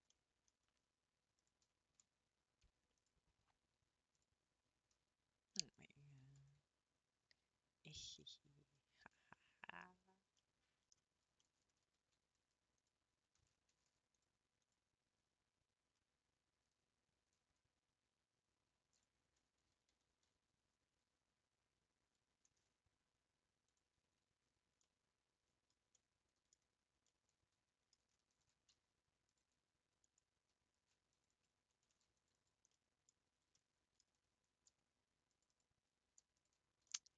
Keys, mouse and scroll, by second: 0.1 middle click, 0.8 scroll up 1, 1.5 click, 3.1 click, 4.2 click, 4.7 scroll up 2, 6.2 g, 8.2 middle click, 8.7 scroll down 1, 9.0 shift+middle click, 9.8-10.1 scroll down 4, 10.4 middle click, 11.0 scroll up 3, 11.4 middle click, 11.8 a, 12.9 click, 13.8 a, 14.7-19.0 drag, 19.9 l, 24.4 a, 24.8 middle click, 25.6 scroll down 2, 25.8 scroll up 2, 25.9 middle click, 26.8 scroll up 2, 27.0-28.3 middle drag, 28.3 ctrl+r, 30.7 ctrl+r, 31.8 ctrl+r, 32.7 middle click, 33.3 scroll up 2, 33.5 middle click, 34.1 ctrl+scroll up 1, 34.4 ctrl+r, 36.4 alt+click, 36.8 scroll up 1, 37.0-37.1 middle drag.